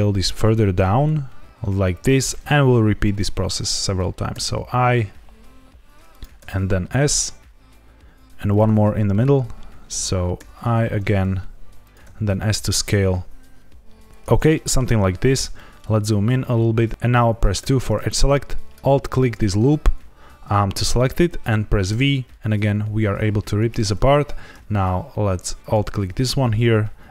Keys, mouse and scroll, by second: 2.0 click, 4.3 i, 6.0 click, 6.3 s, 8.4 click, 10.3 i, 11.8 click, 12.0 s, 14.1 click, 14.5 shift+middle click, 14.9 scroll up 1, 15.5 shift+middle click, 16.1-16.9 scroll up 1, 17.5 2, 18.7 alt+click, 21.8 v, 23.5 right click, 25.5 alt+click.